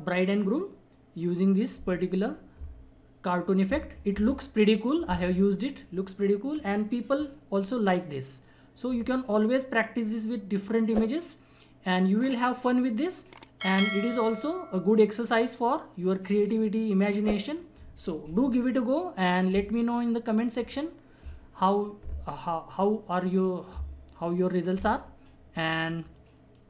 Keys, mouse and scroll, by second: 26.1-26.6 drag.